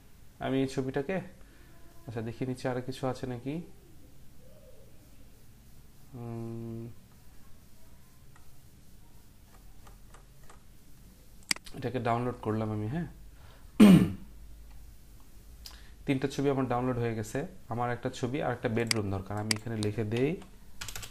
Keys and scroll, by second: 20.1-21.1 typing.